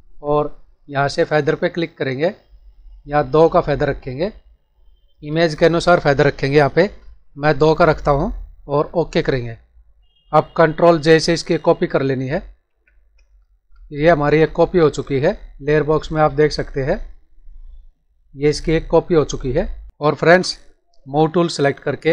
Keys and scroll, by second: 12.7 ctrl+j, 19.9 ctrl+-.